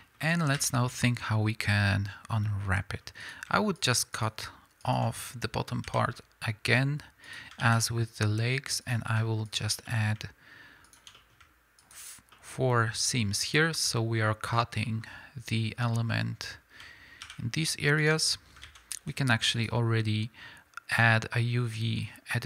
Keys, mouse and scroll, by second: 0.5 2, 0.7 scroll down 1, 3.2 click, 3.8 shift+click, 7.2 ctrl+e, 7.5 alt+a, 7.7-8.8 middle drag, 8.8 click, 9.5 shift+click, 9.8-10.8 middle drag, 10.8 shift+click, 11.1 middle click, 11.8 shift+click, 12.3-22.3 middle drag, 18.0 ctrl+e, 18.6 alt+a, 22.3 click.